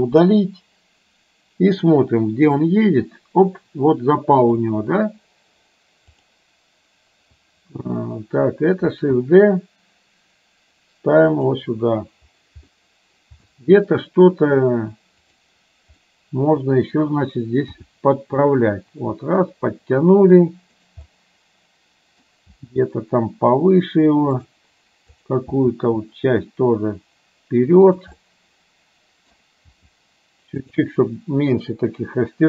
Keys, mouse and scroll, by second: 0.3 Delete, 2.7-4.7 drag, 9.1 shift+d, 12.8-13.4 middle drag, 13.6-13.9 shift+middle drag, 15.3 click, 16.1 middle click, 17.9 g, 21.2-22.4 middle drag, 22.6 g, 28.2-29.3 middle drag, 29.8 g.